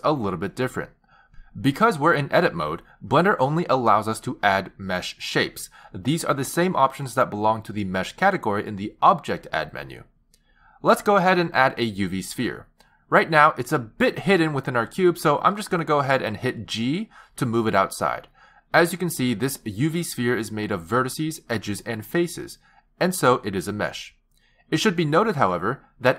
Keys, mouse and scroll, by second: 6.2 click, 16.1 g, 21.1-21.9 scroll up 5, 21.9-22.2 scroll down 1, 23.7-24.5 scroll down 5, 24.7-26.1 scroll up 1.